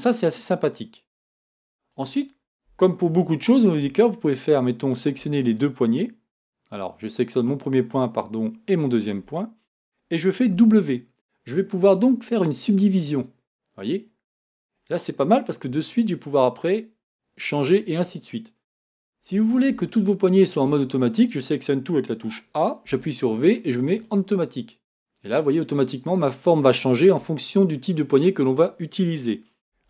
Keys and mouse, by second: 10.5 w, 19.3 a, 19.7 a, 22.9 v.